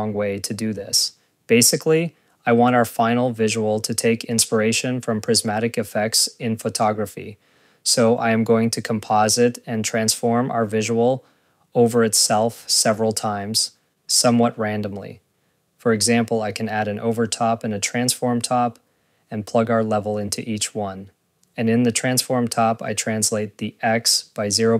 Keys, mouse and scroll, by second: 1.2 click, 1.8 scroll, 4.8 click, 11.0 ctrl+z, 15.1 ctrl+z, 15.3 scroll, 15.8 click, 16.1 scroll, 16.4 Tab, 18.3 click, 18.6 scroll, 18.7 click, 19.4 scroll, 19.7 ctrl+s, 21.1 Tab, 21.8 click, 23.2 click, 23.9 click.